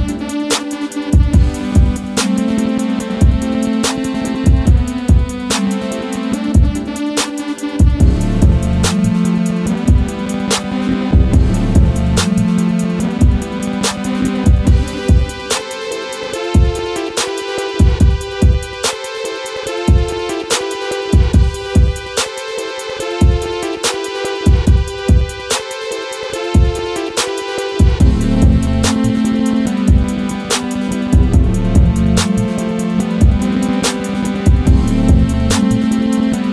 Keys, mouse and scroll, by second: 0.4-1.3 scroll down 1, 1.6-4.3 drag, 4.3 ctrl+z, 8.0 click, 11.9 click, 15.3 right click, 15.8 click, 16.2 ctrl+v, 16.6 ctrl+click, 16.9-17.3 scroll down 1, 17.6 click, 20.2 click, 22.0-31.2 drag, 35.5 click.